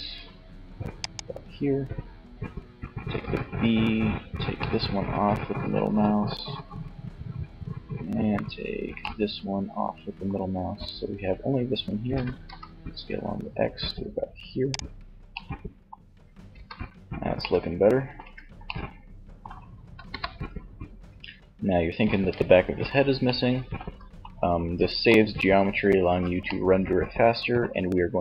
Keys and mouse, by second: 0.2-1.9 drag, 2.3 b, 7.4 b, 11.5 s, 13.8-15.5 drag, 15.5 z, 17.2 Tab, 19.1 KP_3, 20.4 Tab, 21.1 Tab.